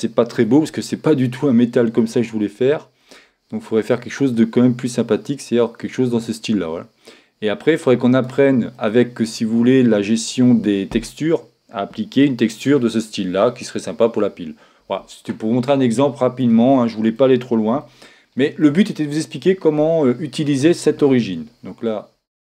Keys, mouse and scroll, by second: 3.0-4.9 drag, 8.8-10.6 middle drag, 15.8-19.7 middle drag.